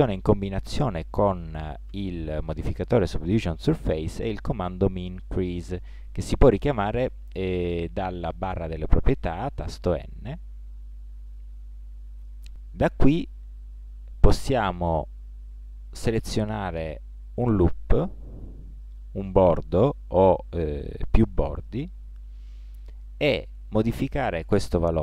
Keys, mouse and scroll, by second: 3.9-10.0 middle drag, 10.0 n, 15.6 middle click.